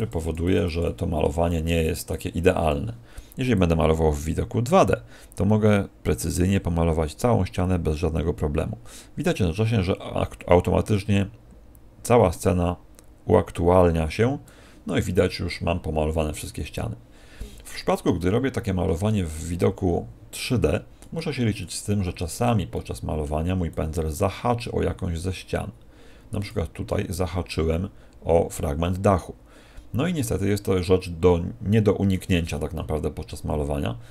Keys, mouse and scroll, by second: 14.9 middle click, 18.1 shift+middle click, 20.9 middle click, 21.5 middle click, 22.8 middle click, 23.7 click, 26.8 middle click, 32.5 middle click.